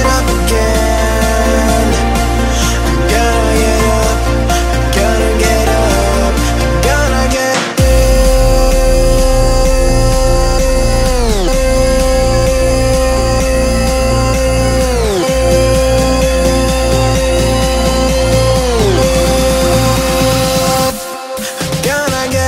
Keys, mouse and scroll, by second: 0.1-1.0 scroll up 1, 2.0-4.3 drag, 4.3 right click, 5.0 click, 5.3 F10, 6.1-7.2 drag, 8.0-10.2 typing, 10.6-12.2 drag, 13.2 click, 14.5 ctrl+click, 14.8 ctrl+c, 15.0 ctrl+v, 15.7 click, 16.1 typing, 16.9-22.0 drag, 22.0 Tab, 22.2 right click.